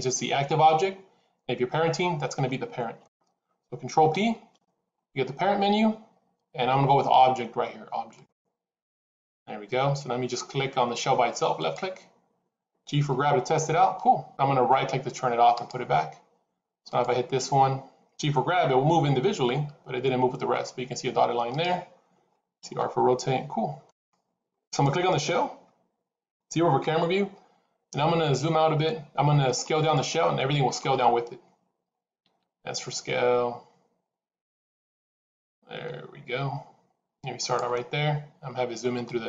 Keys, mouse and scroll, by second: 4.0 ctrl+p, 11.5 click, 13.0 g, 16.7 click, 18.6 g, 22.6 r, 24.6 click, 26.7 KP_0, 28.0 scroll down 2, 29.7 scroll down 2, 32.1 s, 38.9 middle click.